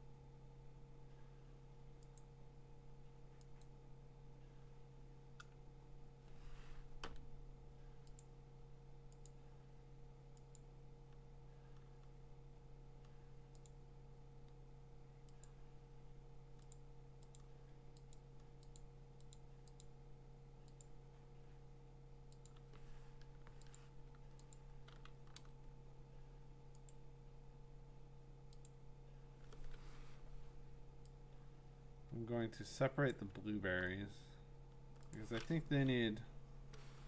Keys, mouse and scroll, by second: 0.4 scroll, 2.2 click, 3.6 click, 8.2 click, 9.3 click, 10.6 click, 15.4 click, 16.7 click, 17.4 click, 18.1 click, 18.8 click, 19.3 click, 19.8 click, 20.8 click, 22.5 click, 23.8 click, 24.5 click, 25.4 v, 26.9 click, 28.4-31.7 drag, 33.1 click, 35.1 click, 36.1 Delete.